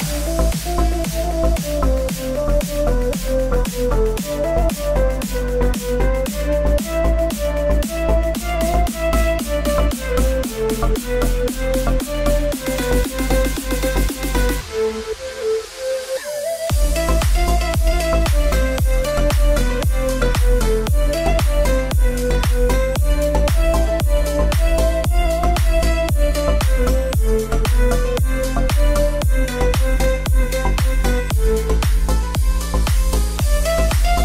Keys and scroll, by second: 13.9 ctrl+t, 19.0 Return, 20.3 alt+Return, 28.3 Return.